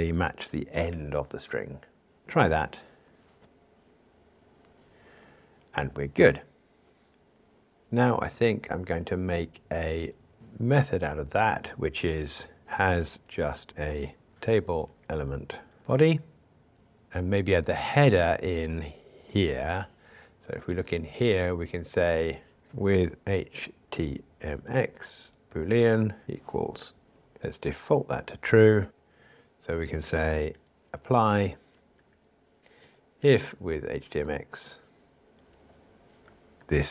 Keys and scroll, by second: 2.4 ctrl+r, 8.2 alt+Up, 10.4 alt+super+m, 19.6 super+c, 20.7 super+b, 25.9 Return, 32.6 Return, 36.6 super+v.